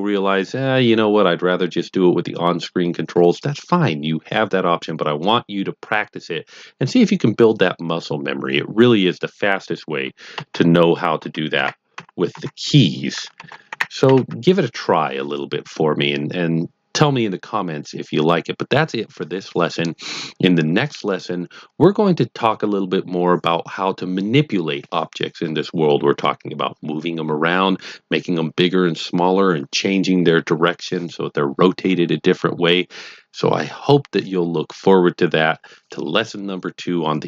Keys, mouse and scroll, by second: 10.3-12.3 typing, 13.4 ctrl+KP_3, 13.6 ctrl+KP_7, 14.0 ctrl+KP_1.